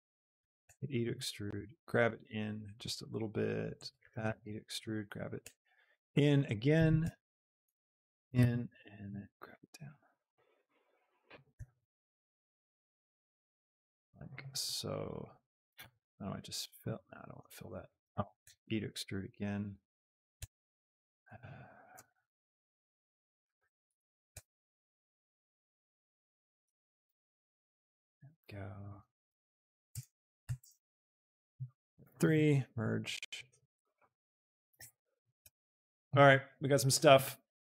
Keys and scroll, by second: 0.6 alt+shift+Escape, 0.9 s, 4.2 Escape, 5.0 g, 5.7 s, 6.8-9.4 typing, 7.2 Escape, 8.6 Escape, 11.9 Escape, 12.3 z, 13.8 s, 18.2 ctrl+z, 18.2 e, 18.5 Escape, 18.9 s, 21.8 g, 22.2 z, 24.0 e, 24.4 Escape, 24.8 s, 27.0 Escape, 27.3 s, 29.2 e, 29.9 KP_0, 30.6 Return, 31.4 a, 32.1 F3, 32.8 m, 33.9 e, 34.3 r, 34.7 Return, 35.4 Tab.